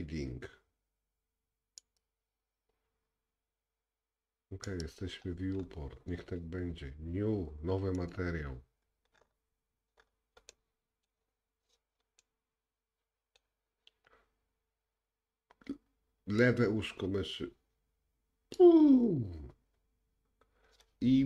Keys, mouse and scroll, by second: 2.0 click, 4.8 click, 5.6-7.8 scroll up 3, 8.0-21.2 drag, 9.2-10.5 scroll up 5, 10.5 middle click, 12.2 middle click.